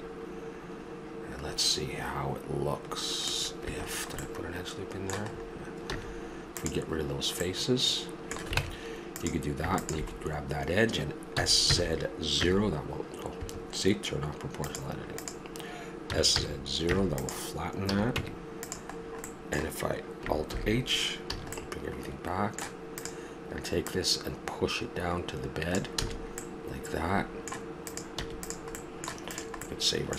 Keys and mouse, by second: 3.9 middle click, 5.9 x, 8.6 ctrl+Tab, 11.3 s, 14.6 click, 16.1 s, 17.9 a, 18.1 Tab, 20.5 alt+h, 21.3 a, 21.6 middle click, 21.8 middle drag, 22.0 middle click, 22.9-23.7 right drag, 26.0 a, 27.8 right click, 28.1 x, 28.8-29.2 middle drag, 29.6 click.